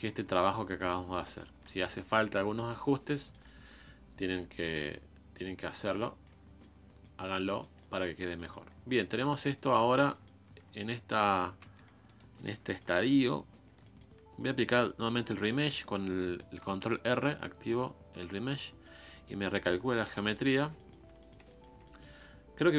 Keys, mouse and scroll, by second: 0.3 scroll up 3, 0.6 middle click, 0.9 scroll down 4, 1.2 scroll up 1, 1.2 middle click, 2.1-2.9 scroll up 1, 3.2 shift+middle click, 3.8-4.7 scroll up 2, 4.7-6.4 drag, 6.4 scroll down 2, 6.6-8.1 middle drag, 8.1 scroll down 1, 8.4 middle click, 8.7 scroll up 4, 8.9-9.9 middle drag, 9.9 scroll up 3, 10.1-11.3 middle drag, 11.3 shift+s, 11.6 f, 12.4 middle click, 12.9-13.8 scroll up 3, 13.1 middle click, 13.8-19.5 shift+middle drag, 19.5 scroll down 4, 19.6 scroll up 1, 19.6 middle click, 20.1 scroll down 1, 20.3 middle click, 20.6 scroll up 1, 20.8-22.7 shift+middle drag.